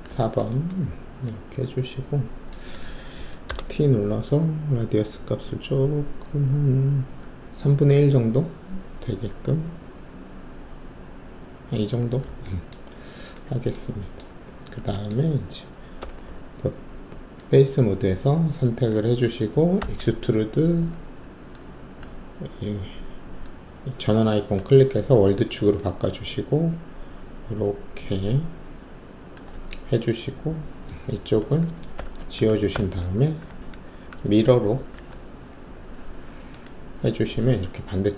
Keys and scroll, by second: 3.4 alt+t, 16.0 alt+3, 19.7 alt+w, 32.7 ctrl+`, 33.4 w, 34.9 ctrl+e.